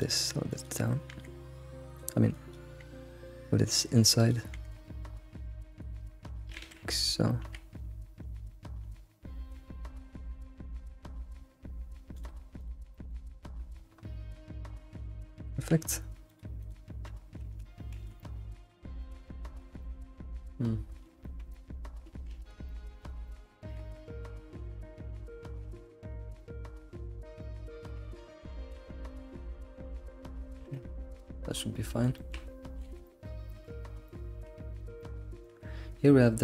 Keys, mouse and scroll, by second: 0.5 click, 1.1 g, 2.3 click, 2.8 g, 4.2 click, 4.6 g, 6.6 ctrl+z, 7.4 g, 12.6 click, 12.8 g, 15.3 click, 15.7 g, 16.6 click, 17.0-17.4 scroll down 2, 17.7 scroll down 1, 18.2-19.3 middle drag, 19.3-19.8 scroll up 7, 19.8-22.3 middle drag, 22.3 ctrl+alt+s, 22.7 middle click, 23.0 click, 23.3 middle click, 23.6 alt+s, 26.4 middle click, 27.2 click, 27.4 middle click, 28.0 e, 28.0 g, 29.1 middle click, 29.8 scroll down 2, 30.0 middle click, 30.6 alt+shift+z, 30.7-31.7 alt+middle drag, 31.7 scroll down 1, 31.9 middle click, 32.6 scroll down 2, 32.8 alt+shift+z, 33.0-34.6 middle drag, 34.6-35.0 scroll up 2, 35.0-36.4 shift+middle drag.